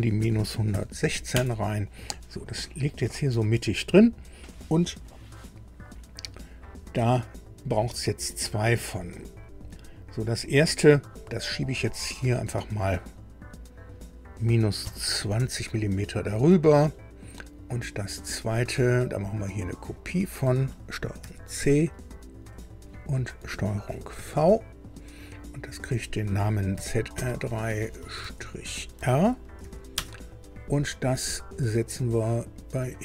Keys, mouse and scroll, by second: 0.2 KP_1, 0.3 KP_1, 0.7 KP_6, 2.8-4.4 drag, 5.0 scroll down 2, 5.8 click, 6.8-7.2 scroll up 1, 8.0 click, 12.2 click, 14.8 KP_Subtract, 15.2 KP_2, 15.4 KP_0, 19.0 click, 20.0 click, 21.2 ctrl+c, 22.5 click, 24.1 ctrl+v, 24.9-25.2 scroll down 2, 25.8 click, 26.7 F2, 27.1 Right, 27.6 BackSpace, 27.8 BackSpace, 28.0 BackSpace, 28.2 BackSpace, 29.6 shift+r, 29.9 Return, 32.9 click.